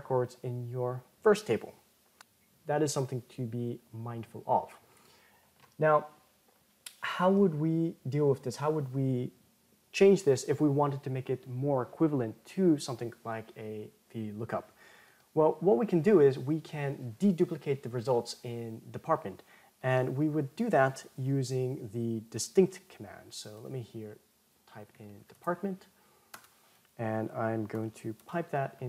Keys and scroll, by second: 27.9 ctrl+shift+m.